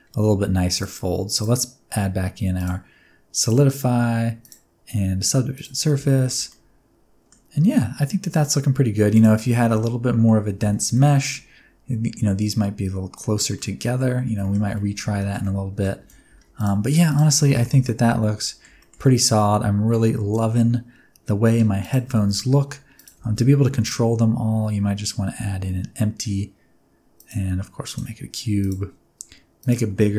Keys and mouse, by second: 0.8 drag, 1.3-2.6 drag, 3.4 click, 4.4-5.8 drag, 6.3 shift+middle click, 6.5-7.3 middle drag, 9.7 middle click, 10.2 click, 10.2 right click, 10.6 alt+a, 10.9 middle click, 13.5-14.0 middle drag, 14.4 shift+middle drag, 14.7 ctrl+middle drag, 15.2 shift+middle click, 15.4-15.8 middle drag, 16.0 alt+a, 17.1 click, 17.4 shift+middle click, 17.7 alt+a, 17.8-18.6 middle drag, 18.8 shift+middle click, 19.3-19.9 middle drag, 20.5-21.4 middle drag, 22.1 shift+a, 23.2 shift+a, 27.9 click, 29.6 click.